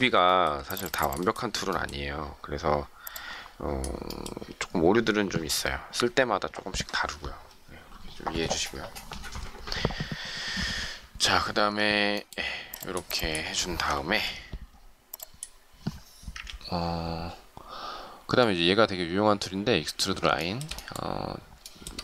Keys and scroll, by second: 14.1 Delete, 16.2 Delete.